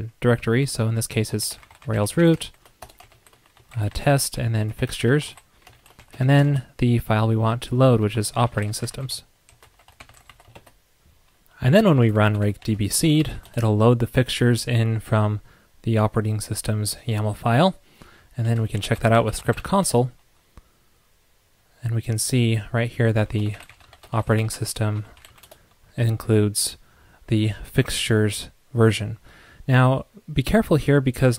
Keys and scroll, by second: 10.5 super+s.